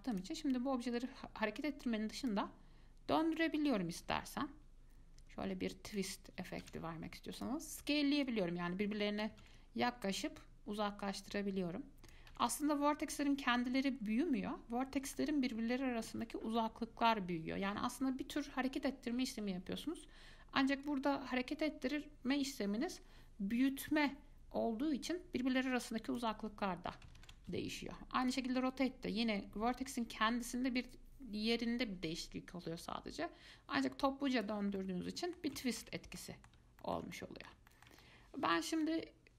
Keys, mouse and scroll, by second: 0.3 click, 2.4 click, 3.6-6.6 drag, 6.8 ctrl+z, 7.6 click, 8.4-9.6 drag, 9.6 ctrl+z, 10.6-12.5 drag, 12.5 ctrl+z, 15.4-16.6 middle drag, 16.6 scroll up 1, 16.8-19.8 middle drag, 21.1-24.1 drag, 27.4 ctrl+z, 28.4 click, 29.5-32.5 drag, 35.0-36.0 middle drag, 36.0 ctrl+z, 36.2-37.0 scroll down 2, 36.4 middle click, 37.0-39.3 shift+middle drag.